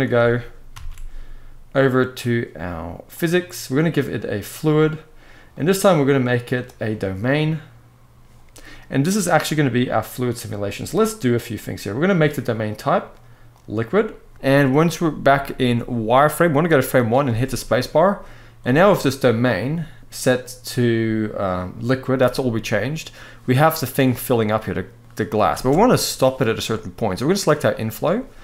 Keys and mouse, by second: 0.5 ctrl+s, 3.9 click, 5.3-7.4 drag, 9.5 middle click, 12.6-13.6 drag, 14.3 alt+a, 14.3 middle click, 15.1-15.5 shift+middle drag, 16.5 middle click, 17.0 space, 18.4-20.0 drag, 24.4-25.3 middle drag, 25.3 space.